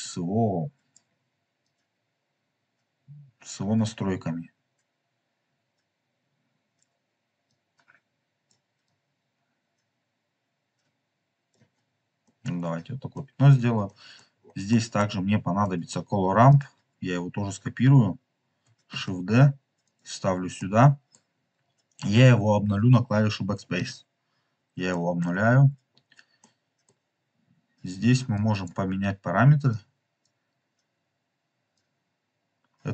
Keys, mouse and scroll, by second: 1.6-6.7 drag, 7.4 click, 8.8-11.4 drag, 11.7-12.1 scroll down 2, 12.2-13.4 middle drag, 13.5 scroll down 3, 13.8 middle click, 14.1-14.6 scroll down 4, 14.6 middle click, 15.6 middle click, 16.4 click, 18.8 shift+d, 19.8 click, 20.5 middle click, 21.0 middle click, 23.8 BackSpace, 24.8 BackSpace, 24.8 middle click, 25.3-26.3 scroll up 5, 26.4 middle click, 27.4 scroll up 1, 28.6 click, 28.9 scroll down 1, 29.6 click, 31.7-32.9 drag.